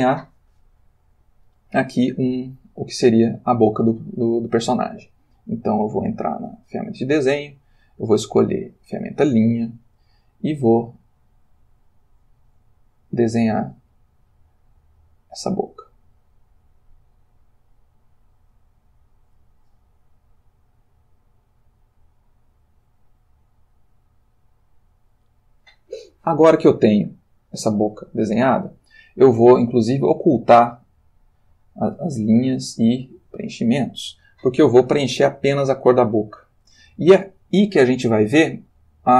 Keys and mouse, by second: 6.3 click, 7.6 click, 8.5 click, 10.8-19.6 drag, 20.7-25.5 drag, 32.3 click, 33.3 click, 35.7-36.9 ctrl+middle drag.